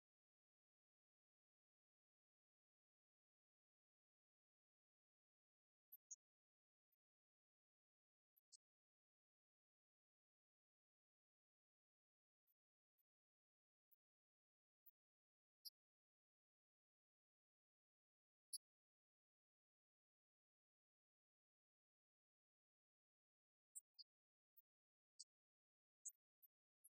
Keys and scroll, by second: 7.3 Down, 8.0 Return, 8.5 Right, 8.7 Left, 9.3 Delete, 10.0 Right, 12.0 Left, 22.5 Right, 24.1 Left.